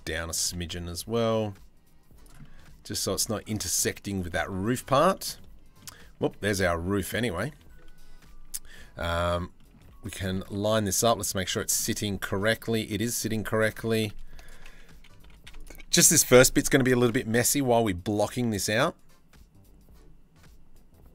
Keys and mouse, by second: 0.0 g, 2.0 middle click, 3.2 middle click, 3.8 shift+middle click, 4.0 middle click, 4.7 shift+middle click, 4.9 middle click, 5.9 g, 8.4 middle click, 9.2 middle click, 9.4 z, 9.9 middle click, 10.1 a, 10.3 middle click, 10.9 z, 11.4 middle click, 12.6 3, 14.0 alt+right click, 14.8 2, 15.2 alt+right click, 16.8 e.